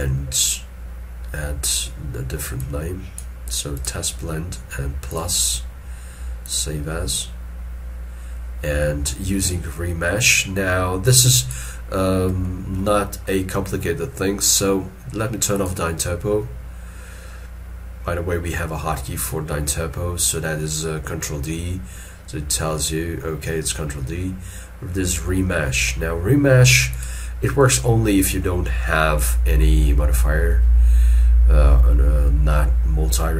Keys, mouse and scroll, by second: 0.2-2.6 scroll up 1, 13.0 middle click.